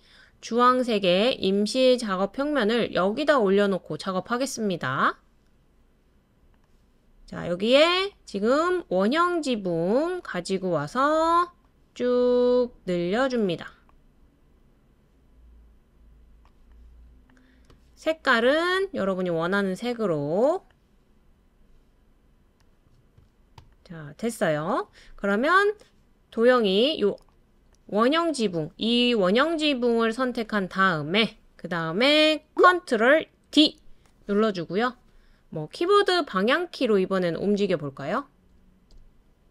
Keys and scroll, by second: 33.5 super+d, 36.0-36.8 Right.